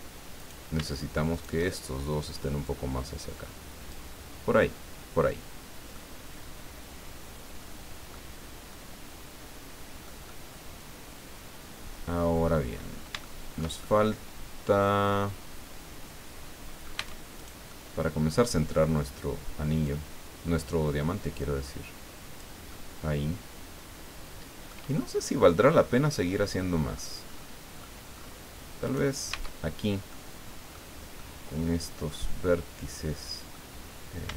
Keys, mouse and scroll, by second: 0.4 right click, 1.3 shift+right click, 2.6-4.1 drag, 4.4 scroll down 2, 4.6 click, 5.5 scroll down 2, 5.9-8.3 drag, 8.7-10.2 drag, 12.7-13.1 scroll up 2, 13.2 shift+middle click, 13.8-17.1 shift+middle drag, 17.0 Tab, 17.4-18.6 right drag, 17.7 click, 18.7-19.0 scroll down 2, 19.8-22.6 drag, 22.7-24.9 middle drag, 25.2-25.5 scroll down 1, 25.9-27.1 middle drag, 27.2-27.6 scroll up 1, 27.8-28.4 scroll up 2, 28.8 right click, 29.3 Tab, 30.1 click, 31.2-33.7 drag.